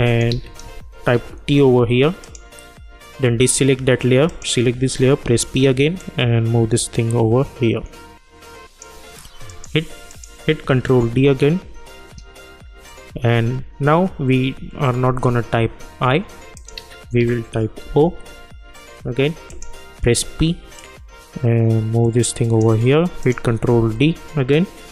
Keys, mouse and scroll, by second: 0.1 click, 0.3 ctrl+a, 1.1 shift+t, 2.2 click, 5.2 p, 6.0-9.5 drag, 10.9 ctrl+d, 16.5 click, 16.7 ctrl+a, 17.8 shift+o, 19.5 click, 20.0 p, 20.8-23.2 drag, 23.7 ctrl+d.